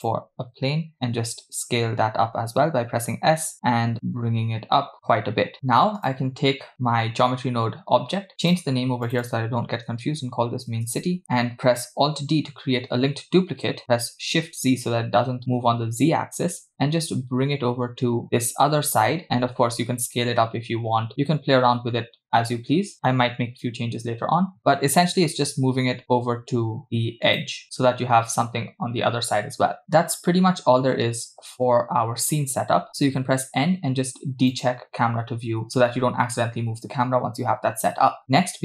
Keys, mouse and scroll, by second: 0.9 s, 6.0 click, 8.5 click, 9.1 click, 9.3-11.2 drag, 12.4 alt+d, 19.6 s, 26.5 g, 30.2-30.8 scroll down 1, 30.9-31.5 scroll up 1, 31.6-32.3 scroll up 1, 32.4-32.8 scroll down 1, 33.2 n, 34.5 click, 35.9 n, 36.2-36.7 scroll down 3, 36.7-37.2 scroll up 3, 37.3-38.2 scroll down 2.